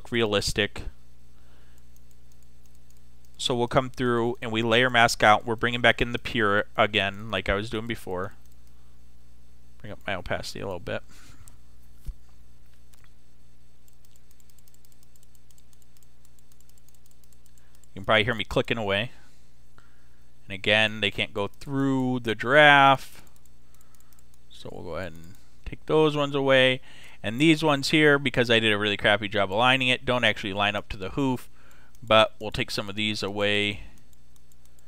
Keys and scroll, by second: 12.7 ], 17.2 space, 20.1 [.